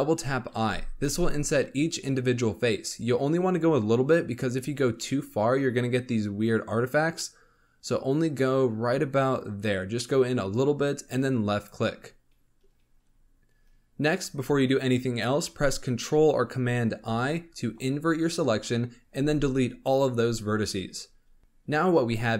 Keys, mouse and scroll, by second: 0.5 i, 12.3-13.1 scroll down 13, 13.5 scroll up 2, 16.9 ctrl+i, 19.1 x, 21.0-21.4 scroll down 1, 21.4 g.